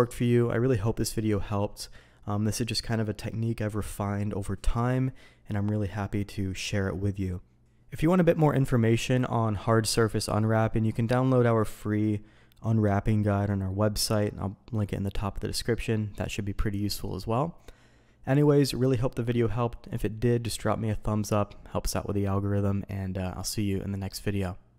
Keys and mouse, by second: 18.3 click, 23.1-24.1 drag.